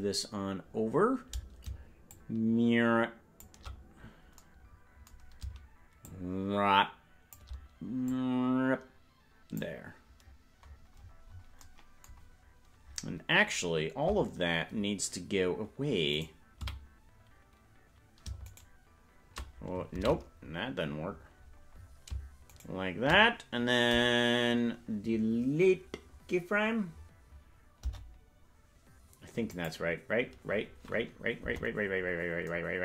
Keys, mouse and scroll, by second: 2.1-3.9 shift+drag, 3.9-4.3 scroll down 6, 6.0-7.4 shift+drag, 8.1-9.6 drag, 10.6-11.5 scroll up 21, 11.5 scroll down 1, 16.1 right click, 16.6 a, 18.5-20.4 shift+right drag, 20.9 ctrl+z, 21.1-21.8 scroll up 12, 21.8-22.5 scroll up 8, 22.5-23.6 shift+right drag, 22.5-23.6 scroll up 1, 31.3 Delete, 31.4 KP_0.